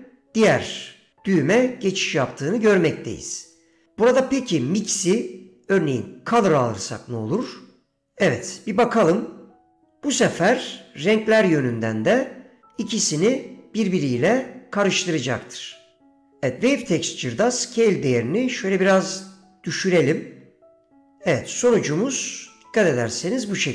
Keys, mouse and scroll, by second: 5.0-7.8 drag, 9.2-21.2 drag, 23.2 middle click.